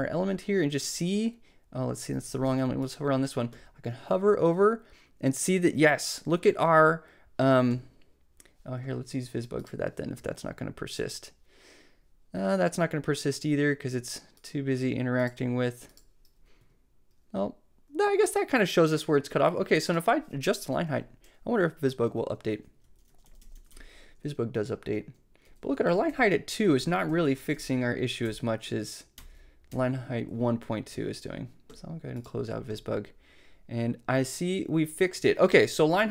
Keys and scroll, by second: 2.5 shift+super+c, 16.6 Tab, 22.1 alt+Up, 25.5 alt+Down, 29.2 alt+Up, 29.7 alt+Down.